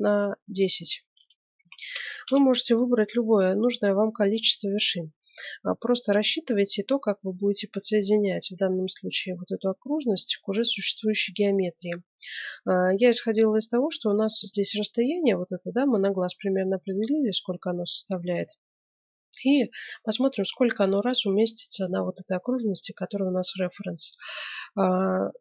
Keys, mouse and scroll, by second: 0.0-1.6 drag.